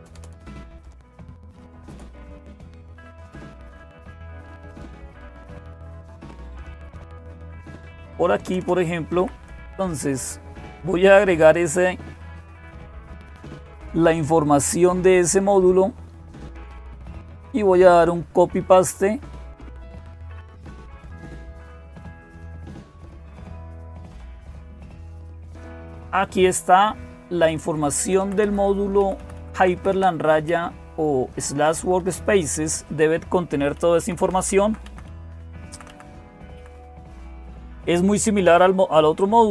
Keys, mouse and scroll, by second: 0.0-39.5 typing, 0.0 Return, 0.1 Return, 0.3 Return, 0.5 Return, 0.8 Return, 1.0 Return, 1.2 Return, 1.4 Return, 1.5 Return, 1.7 Return, 3.1-3.7 Up, 3.8-4.7 Up, 5.2 Down, 5.9-7.2 Down, 7.6 Up, 7.8 Up, 8.3 Return, 8.4 Return, 8.9 Up, 10.8-22.2 drag, 22.6 click, 22.8 right click, 23.7 click, 25.6 Home, 26.2-27.4 Up, 27.7 Up, 27.8 Up, 28.0 Up, 28.2 Up, 28.8 Down, 29.0 Down, 29.2 Down, 29.4 Down, 29.6 Down, 30.3 Up, 31.3 Right, 31.6 Right, 31.8 Right, 32.4 Down, 33.2 Down, 34.0 Down, 34.2 Down, 34.4 Down, 34.7 Down, 34.9 Down, 35.1 Down, 35.5 Down, 35.7 Down, 36.4 Up, 37.3-38.4 Down.